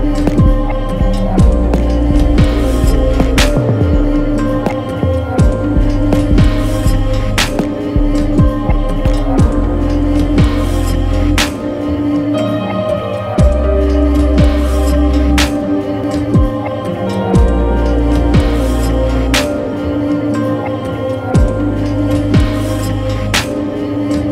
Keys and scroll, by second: 7.3 6, 7.5 Return, 9.6-11.6 typing, 16.8 shift+super+}.